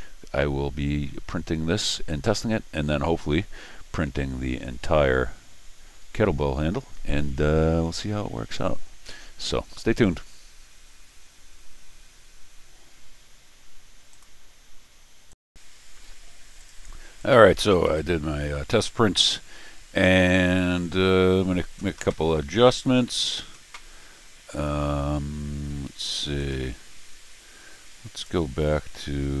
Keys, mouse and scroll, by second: 14.1 click, 15.3 click, 16.6 click, 17.2 click, 18.7 middle click, 19.7-20.3 scroll down 3, 20.3 middle click, 26.4 click, 28.1 click.